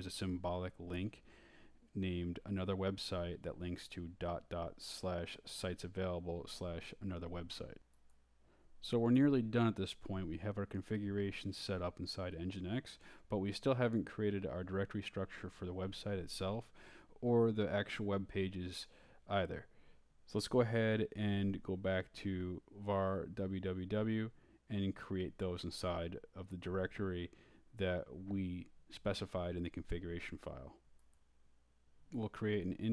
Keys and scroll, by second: 5.9-6.7 typing, 8.3-10.4 typing, 11.0 Return, 15.8-17.2 typing, 19.2-23.3 typing, 25.5-26.9 typing, 28.4-32.9 typing.